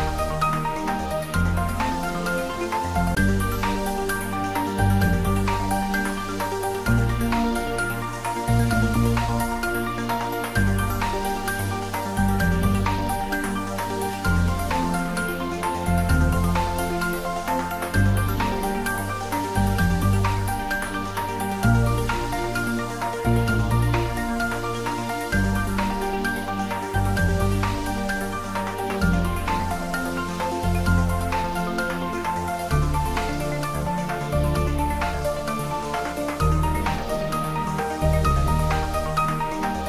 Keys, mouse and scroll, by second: 0.5 click, 1.3 g, 6.8 click, 9.9-10.5 scroll up 1, 11.5 shift+click, 12.6 shift+d, 13.1 r, 16.6 click, 17.3 g, 18.8 click, 19.3 r, 20.7 click, 21.4 g, 22.5 click, 23.0 scroll down 1, 23.8-28.1 middle drag, 28.1-34.2 drag, 34.2 shift+d, 35.9-37.3 typing, 37.5 click, 38.5 g.